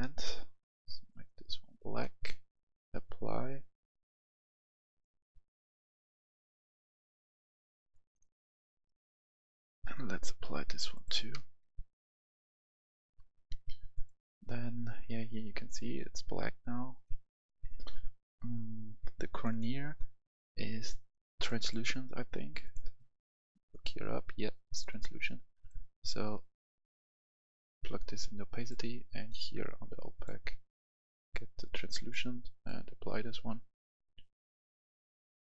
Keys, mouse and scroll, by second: 13.1 F10, 13.9-28.0 drag.